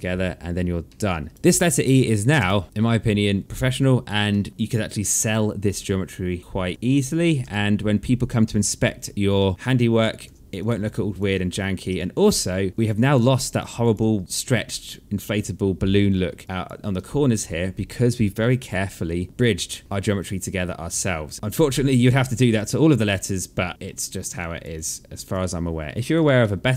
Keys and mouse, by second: 0.4 alt+middle click, 0.9 right click, 1.3 click, 1.9 space, 3.1 space, 3.4 alt+click, 3.8 alt+middle click, 6.4 alt+click, 6.9 3, 8.1 alt+click, 8.6 1, 8.9 alt+click, 9.8 3, 10.1 click, 10.4 alt+click, 11.2 alt+click, 12.5 alt+middle click, 12.7 alt+click, 14.0 click, 15.6 alt+click, 16.3 alt+click, 18.2 1, 19.7 alt+middle click, 19.8 alt+click, 21.3 3, 22.0 1, 22.6 alt+middle click, 23.9 alt+click, 24.8 alt+click, 25.9 alt+middle click, 26.3 alt+click.